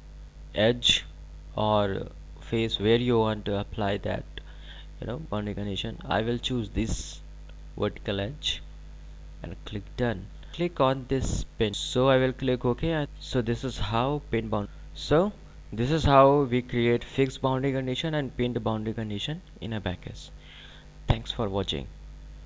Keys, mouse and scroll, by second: 7.2 click, 9.7 click, 12.5 click.